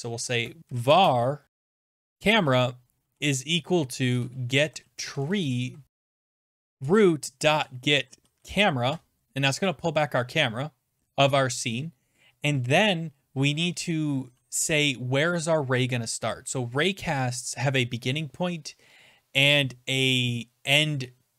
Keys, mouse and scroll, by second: 0.0-8.9 typing, 0.0 middle click, 0.0 click, 8.9 Tab, 9.5 Return.